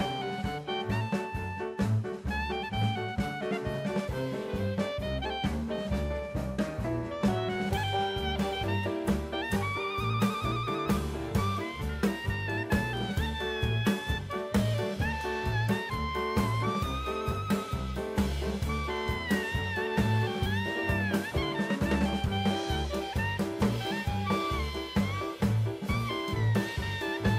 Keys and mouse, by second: 1.6 click, 6.3 click, 8.3 click, 9.2 middle click, 10.3 click, 15.0 click, 16.4 middle click, 17.5 click, 18.8-20.5 drag, 21.0 middle click, 25.4 middle click.